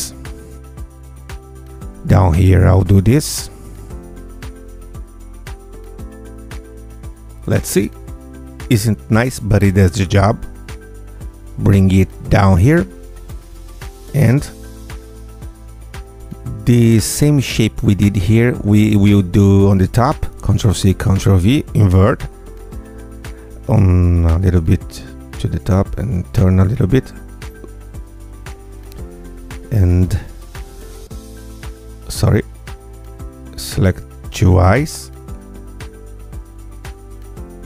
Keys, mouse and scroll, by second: 0.1 click, 0.6 click, 1.3 click, 1.9 click, 2.3 click, 3.1 click, 3.9 click, 4.3 click, 5.4 click, 6.1 click, 6.5 Tab, 7.0 click, 7.9 g, 9.0 click, 9.4 r, 10.1 click, 10.3 g, 11.1 click, 11.4 g, 12.5 click, 14.4 click, 14.4 right click, 15.0 g, 15.5 click, 16.2 g, 17.1 ctrl+click, 18.2 ctrl+c, 18.6 ctrl+v, 18.8 ctrl+g, 19.3 ctrl+click, 21.4 click, 22.4 g, 23.0 click, 23.1 r, 23.7 click, 23.9 g, 25.1 click, 25.3 r, 26.4 g, 27.3 click, 27.5 r, 29.2 click, 30.3 ctrl+click, 31.3 ctrl+click, 31.8 ctrl+click, 33.5 ctrl+click, 34.9 ctrl+click, 36.5 ctrl+click, 37.4 ctrl+click.